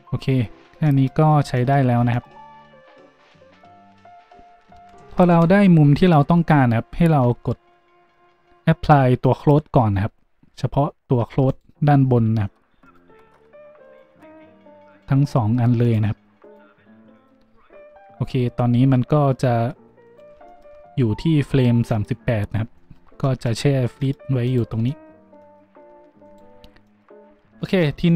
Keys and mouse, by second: 1.5 a, 5.2 shift+z, 7.3 z, 11.5 middle click, 14.9 middle click, 15.0-20.0 drag, 20.0 middle click, 20.1-24.4 shift+drag, 24.4 middle click, 24.4 a, 24.5-26.2 drag, 26.2 middle click, 26.3-28.0 drag, 27.6 shift+a, 28.0 middle click.